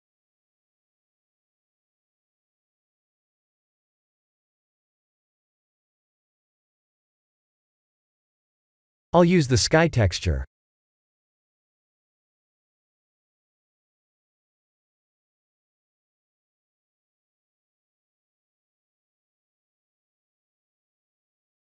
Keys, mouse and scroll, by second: 4.1-4.8 middle drag, 5.1 KP_0, 8.4 click, 9.7-11.8 drag, 15.8-17.1 drag, 18.7-20.1 drag.